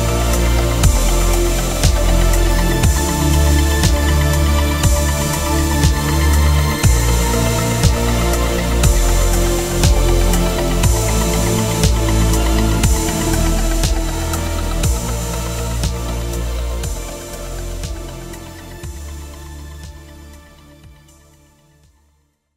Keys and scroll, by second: 3.5 ctrl+g, 5.0 ctrl+Tab, 9.7 ctrl+t, 18.2 Return, 18.4 Right, 19.0 ctrl+j, 19.9 ctrl+z, 20.7 ctrl+alt+z, 22.1 ctrl+l.